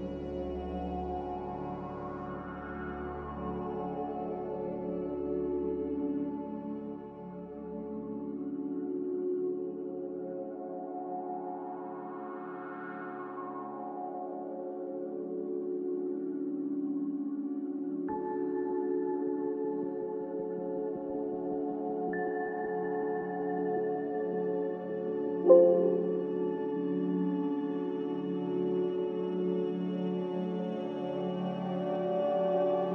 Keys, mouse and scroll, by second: 11.6 ctrl+z, 12.4 ctrl+z, 22.8 a, 24.4 5, 24.5 Return, 28.7 ctrl+w.